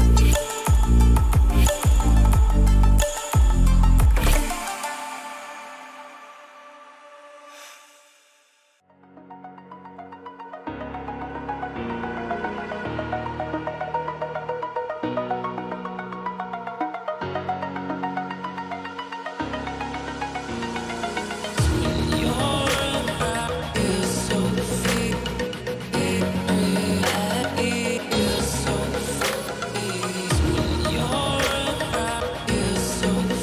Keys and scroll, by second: 0.0 =, 9.4 Return, 17.5 ctrl+t, 20.4 Return, 21.1 ctrl+=, 21.1 ctrl+=, 21.3 ctrl+=, 21.9 ctrl+=, 28.1 [, 32.8 ctrl+-, 32.8 ctrl+-.